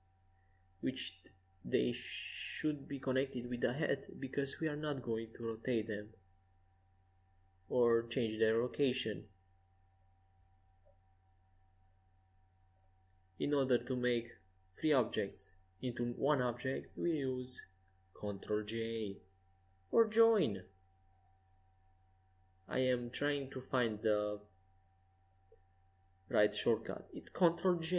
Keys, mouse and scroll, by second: 1.8-5.7 right drag, 5.7 middle click, 6.7 ctrl+alt+shift+c, 8.9-10.8 right drag, 10.3 ctrl+alt+shift+c, 12.6-13.6 right drag, 13.6 click, 13.7 right click, 13.8 click, 14.0-18.3 right drag, 19.8 ctrl+alt+j, 22.1-26.7 right drag, 26.7 g.